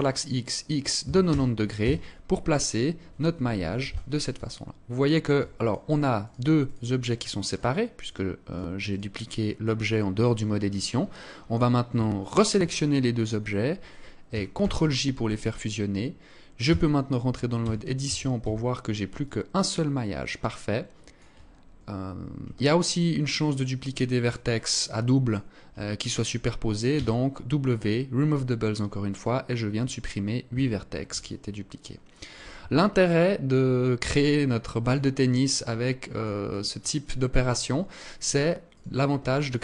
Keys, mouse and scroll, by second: 3.1 z, 4.0 alt+click, 5.1 right click, 5.7 right click, 6.5-8.3 right click, 9.3 right click, 9.6 right click, 11.7 right click, 14.0 ctrl+j, 16.1 Tab, 17.1 a, 18.7 alt+click, 22.0 alt+click, 22.9 alt+click, 24.3 alt+click, 26.4 w, 29.9 Tab, 30.7 alt+click, 32.0 Tab, 32.5 alt+click, 34.6 alt+click, 38.1 alt+right click, 39.0 click.